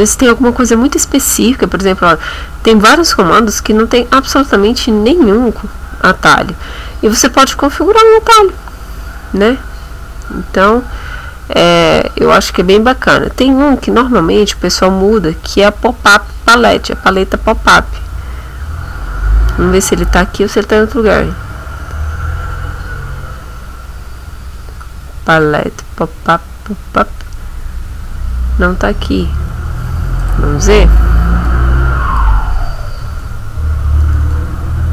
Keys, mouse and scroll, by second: 6.1-6.4 scroll down 2, 7.3 scroll up 2, 9.7 scroll down 2, 10.6-11.2 scroll down 2, 11.4-11.8 scroll down 2, 11.9-12.3 scroll down 1, 12.5-12.9 scroll down 1, 13.1-13.5 scroll down 2, 13.7-14.1 scroll down 2, 14.3-14.7 scroll down 2, 15.7 scroll down 2, 16.5-16.9 scroll down 2, 18.2 scroll down 2, 19.0 scroll up 2, 21.1 scroll down 1, 21.9-22.3 scroll down 1, 22.7-23.2 scroll up 1, 24.2-24.8 scroll up 1, 27.0 scroll down 1, 28.3 scroll down 2, 29.1 scroll down 2, 29.6 scroll up 2, 30.2 click, 31.2-34.9 typing.